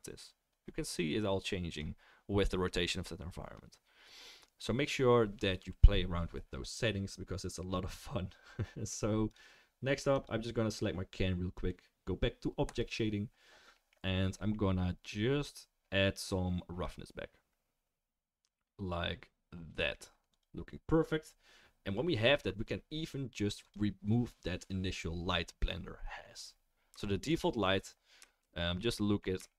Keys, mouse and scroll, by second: 9.3-10.2 drag, 11.1-11.5 drag, 20.4-23.6 drag, 26.3-27.0 drag, 27.0 shift+right drag, 27.1-29.5 shift+middle drag.